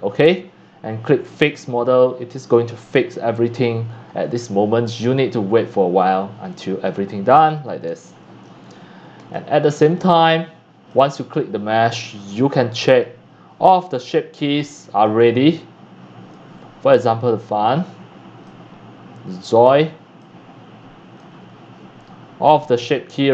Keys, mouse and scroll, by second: 0.3-2.4 drag, 6.4 middle click, 6.4-6.7 scroll up 3, 7.8 shift+middle click, 8.7-9.0 scroll, 9.3 middle click, 9.7 middle click, 10.1 shift+middle click, 10.2 shift+click, 11.2-12.3 right drag, 12.3-18.8 drag, 20.6 middle click, 21.3 drag, 22.9 click.